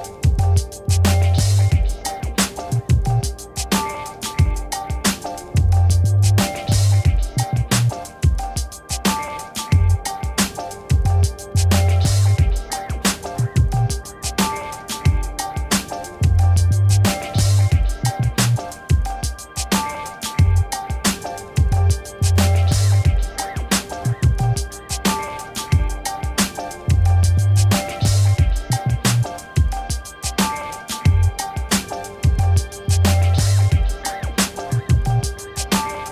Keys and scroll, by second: 23.0-25.4 typing, 32.0 5, 32.2 0.